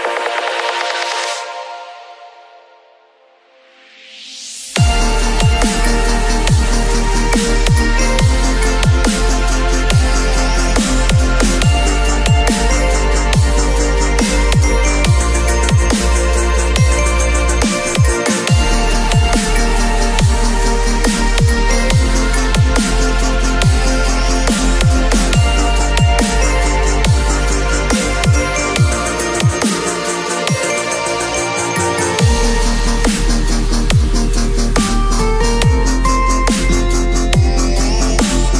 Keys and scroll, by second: 4.8 v, 22.1 ctrl+a, 23.2 ctrl+shift+c, 23.6 ctrl+v, 25.4 ctrl+shift+a.